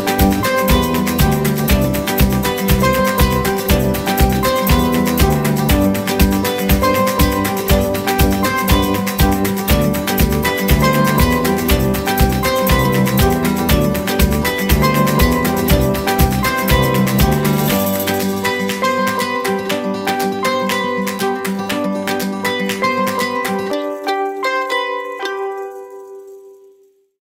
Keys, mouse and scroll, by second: 0.1 typing, 1.8 Return, 14.1 middle click.